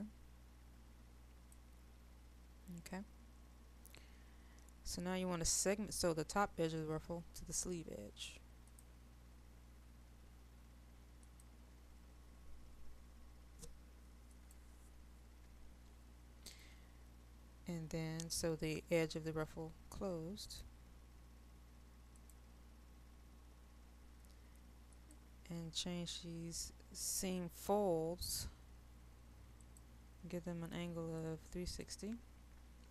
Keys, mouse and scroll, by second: 3.9 click.